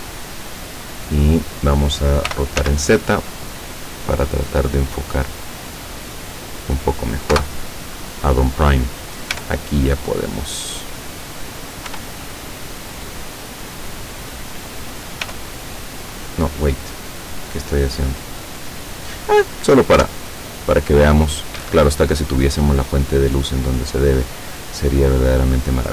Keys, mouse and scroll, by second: 0.1-1.3 drag, 2.3 r, 2.7 z, 3.9 click, 5.2-7.2 middle drag, 7.2-7.9 scroll up 1, 7.4 KP_0, 7.9-9.4 scroll up 1, 9.4 middle click, 9.4 g, 11.0 click, 11.9 r, 14.4 click, 15.3 g, 16.0 click, 20.0 F12, 21.6 Escape, 22.3 scroll down 2, 23.4 right click, 24.1-25.4 middle drag, 25.8-25.9 drag.